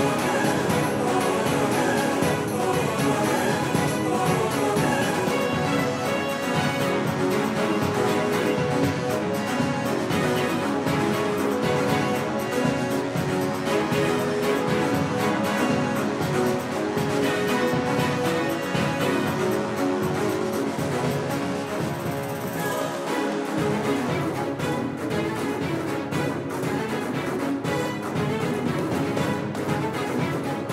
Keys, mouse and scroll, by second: 8.0-12.5 middle drag, 12.5-14.8 drag, 15.0 KP_5, 15.6 KP_1, 16.8 KP_3, 17.8 KP_5, 19.7-21.0 middle drag, 24.0 KP_4, 25.6 KP_6, 26.8 KP_7, 27.6 KP_9, 28.7 KP_8.